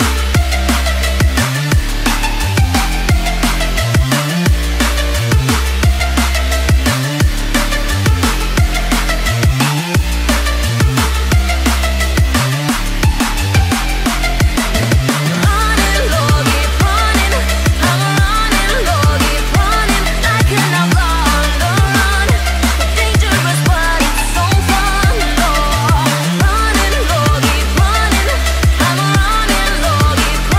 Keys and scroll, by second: 1.3 t.